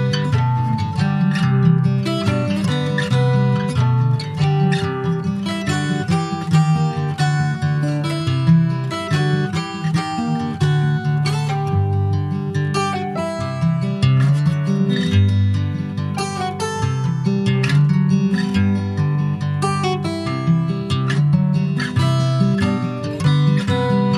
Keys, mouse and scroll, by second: 0.2 ctrl+s, 0.3 click, 0.9 shift+d, 2.5 /, 3.0 middle click, 3.4 Tab, 3.7 middle click, 4.1 scroll up 2, 4.5 middle click, 4.9 3, 5.2 click, 5.9-6.3 scroll up 1, 6.3 middle click, 6.7 click, 7.9 click, 8.5 alt+shift+click, 9.8 Tab, 10.0 click, 10.6 ctrl+s, 10.7 click, 11.3 alt+middle click, 12.2 s, 14.1-14.4 scroll down 3, 14.4 s, 17.4 s, 19.9 s, 21.7 middle click, 22.3 ctrl+s, 22.9 /.